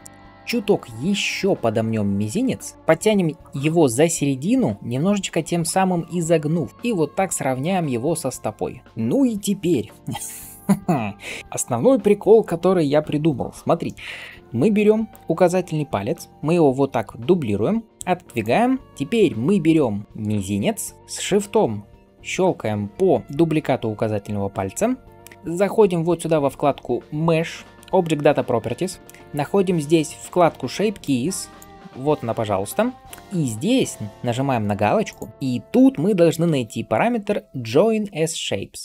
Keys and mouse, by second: 0.7-1.3 typing, 8.8-16.3 middle drag, 16.8-21.1 middle drag, 23.5-30.9 middle drag, 30.9-38.8 drag.